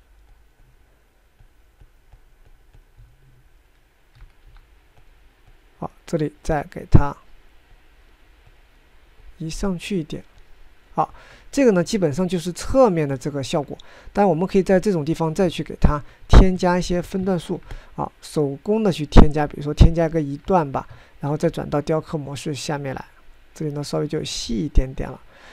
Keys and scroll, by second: 4.9 f, 17.0 ctrl+Tab, 21.3 ctrl+Tab, 21.9 ctrl+Tab.